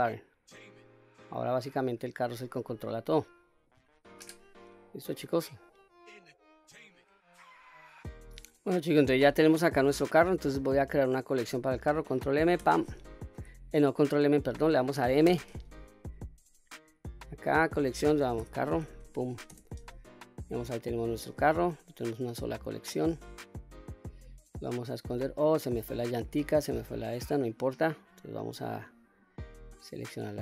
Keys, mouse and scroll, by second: 0.1 click, 1.6-3.9 drag, 4.3 ctrl+z, 4.8-5.3 middle drag, 5.8-6.5 scroll down 1, 6.5 middle click, 8.6-9.3 middle drag, 9.4 scroll down 1, 9.6 scroll up 2, 10.1-10.6 middle drag, 14.4 click, 15.3 m, 18.8 r, 23.0 click, 24.2 click, 26.3 click, 28.8 click, 29.5-30.0 middle drag.